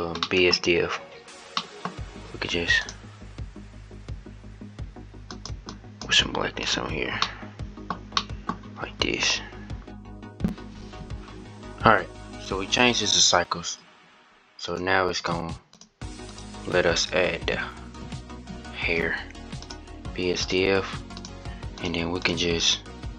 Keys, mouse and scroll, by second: 5.1 click, 6.5 click, 7.0-10.0 middle drag, 10.0-19.5 drag, 20.9 click, 21.9 click.